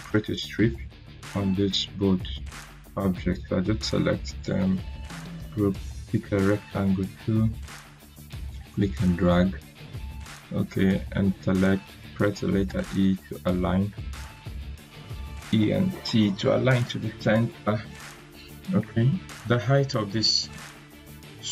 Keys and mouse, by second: 2.9-4.1 drag, 4.9 ctrl+g, 6.2-9.7 drag, 12.6 e, 13.8 c, 18.8 c, 18.8 click.